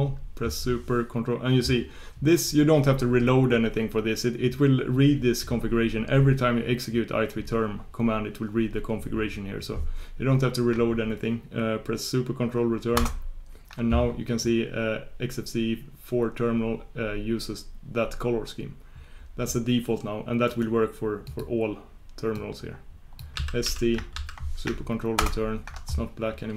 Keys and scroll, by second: 25.2 ctrl+super+Return.